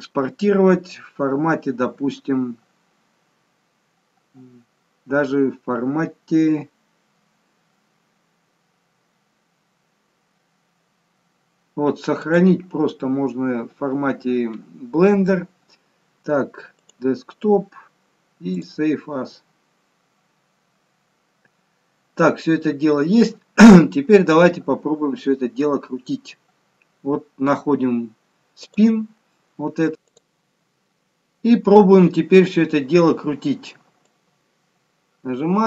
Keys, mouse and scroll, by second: 24.2-24.6 scroll down 2, 25.5 scroll down 1, 28.6 click.